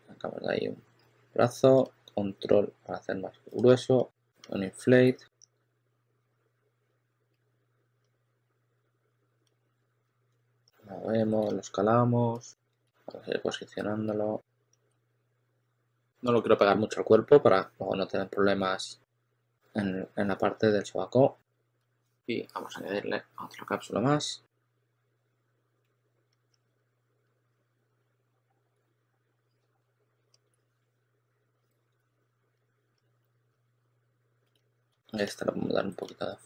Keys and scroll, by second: 0.9 w, 3.6 w, 4.2 q, 5.0 w, 6.2-14.8 typing, 21.4 q, 21.7 s, 25.7 w, 26.2 w, 27.1 w, 27.4 q, 29.7-36.4 typing.